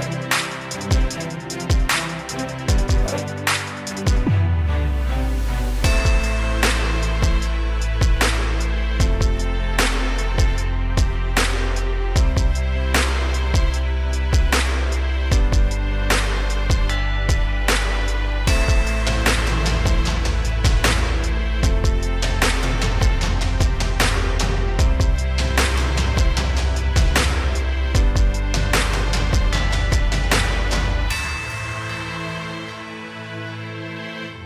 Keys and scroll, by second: 14.7 p, 20.9 v, 22.7 p, 28.6 v, 30.1 p.